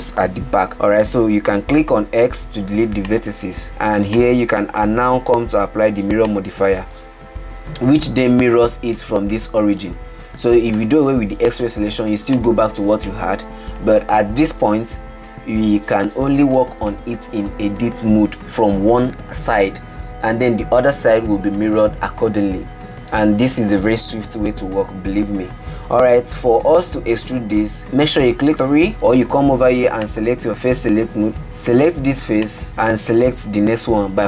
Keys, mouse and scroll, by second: 2.5 x, 4.6 click, 6.8-7.7 drag, 8.3 Tab, 8.8 scroll up 5, 9.5-11.2 middle drag, 11.2 alt+z, 11.9-12.8 middle drag, 12.8 click, 13.5-14.7 middle drag, 14.7 Tab, 15.7 scroll up 4, 16.8-20.9 shift+middle drag, 30.5-31.9 drag, 32.7 click.